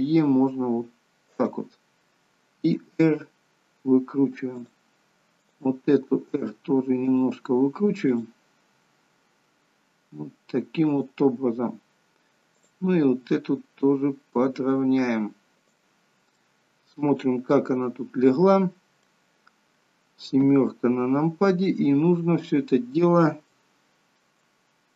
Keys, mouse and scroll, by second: 2.8 r, 5.6 click, 6.1 r, 8.1 click, 8.8 r, 12.7 click, 13.3 r, 16.5 middle click, 19.3 scroll down 3, 20.5 KP_7, 22.3 scroll up 3, 23.5 shift+middle click.